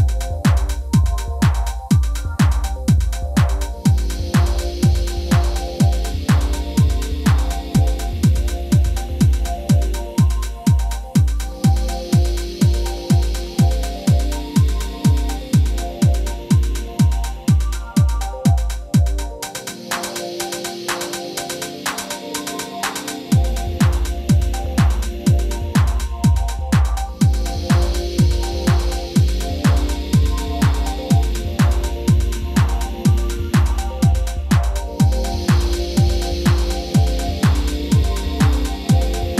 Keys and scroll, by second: 12.9 super+o, 21.9 super+o, 22.5 super+ㅇ, 23.1 super+ㅇ.